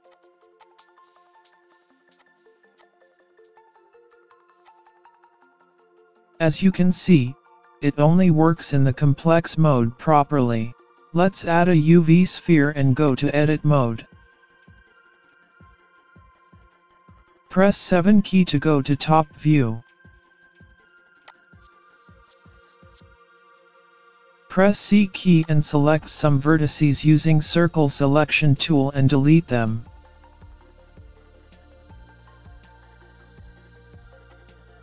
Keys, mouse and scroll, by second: 0.1 click, 0.6 click, 2.2 click, 3.5 middle click, 4.6 click, 7.1 scroll down 3, 7.2 scroll up 2, 7.4 middle click, 8.5 click, 9.3 scroll up 1, 9.4 middle click, 11.5 shift+a, 14.1-14.9 scroll up 4, 14.9-15.6 scroll up 1, 16.5 Tab, 18.4 KP_7, 20.2 scroll up 1, 20.7-21.0 scroll up 1, 21.3 click, 23.4 scroll up 1, 24.0 c.